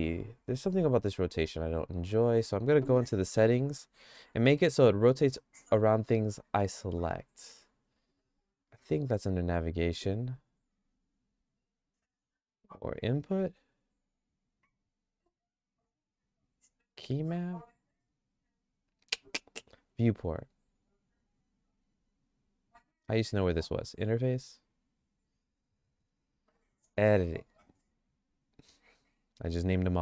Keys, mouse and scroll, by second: 0.6-1.6 drag.